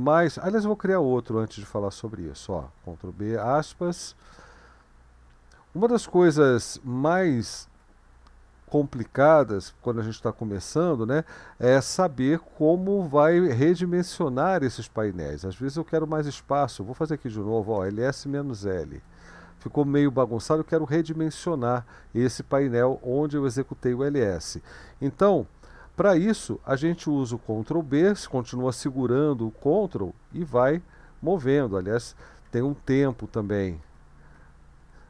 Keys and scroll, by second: 2.5 ctrl+b, 3.4 shift+', 7.1 ctrl+b, 7.7-35.0 Left, 17.3-18.8 typing, 19.0 Return, 27.9 ctrl+b, 29.6 ctrl+Right, 30.3 ctrl+Right, 32.7 ctrl+b, 33.5 ctrl+Right, 34.4 ctrl+Right.